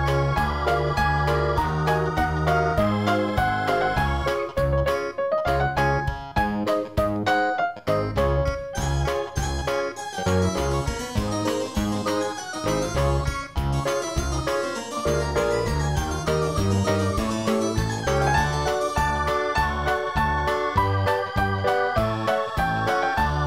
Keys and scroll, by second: 0.0 ctrl+z, 5.2 ctrl+z.